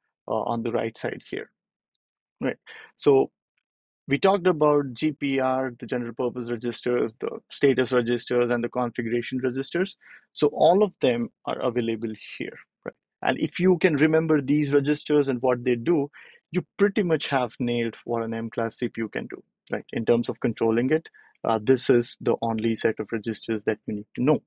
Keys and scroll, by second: 1.8 BackSpace.